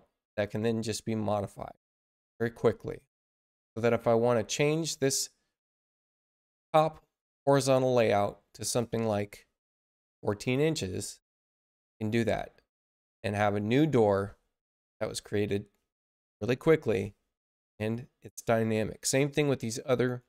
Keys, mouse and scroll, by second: 0.4 click, 1.6 click, 8.5 click, 9.8-10.7 typing, 12.7 click.